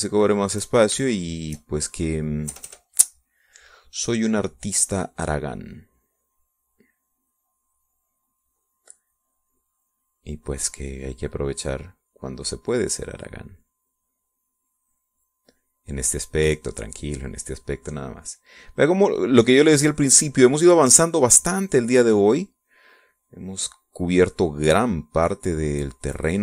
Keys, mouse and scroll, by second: 0.4-1.7 shift+drag, 2.1-3.3 shift+drag, 3.3 shift+middle click, 3.5 shift+KP_Add, 3.9 shift+middle click, 5.0-6.3 drag, 6.5-9.8 drag, 10.2-20.9 drag, 21.0 middle click, 22.0-23.1 drag, 23.2 click, 24.3-26.4 drag.